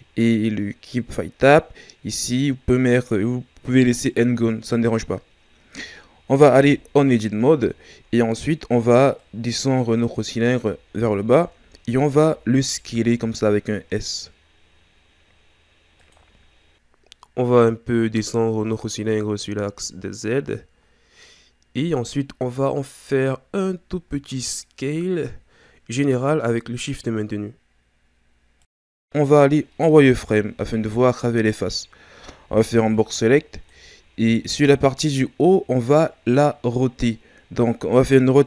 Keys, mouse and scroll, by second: 6.6 Tab, 7.7-9.2 shift+scroll down 5, 9.2-10.9 drag, 10.9 shift+scroll down 7, 12.1 scroll down 1, 13.1 s, 16.4 scroll down 2, 17.3-18.7 scroll up 1, 18.7 shift+scroll up 1, 18.8 shift+scroll down 2, 20.0-23.0 drag, 29.6-30.0 scroll up 1, 30.0 z, 30.7 right click, 32.5 b, 38.3 r.